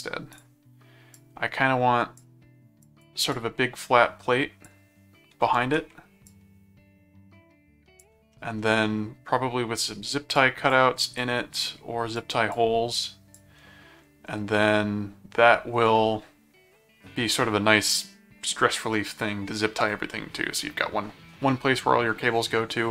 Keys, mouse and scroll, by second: 0.3 click, 1.1 click, 2.8-4.6 drag, 5.6 ctrl+z, 6.3-8.0 drag, 8.3 middle click, 10.4 click, 11.2 click, 12.1 click, 13.0 click.